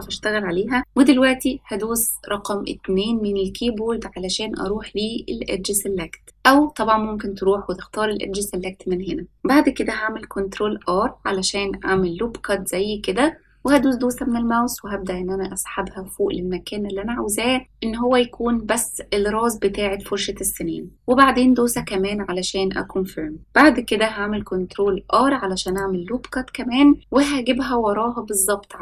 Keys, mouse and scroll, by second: 10.5 ctrl+r, 24.6 ctrl+r.